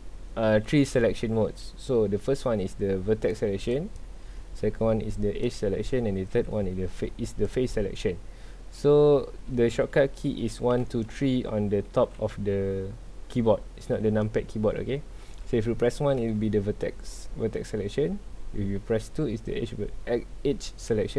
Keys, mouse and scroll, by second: 3.7 click, 5.1 click, 7.4 click.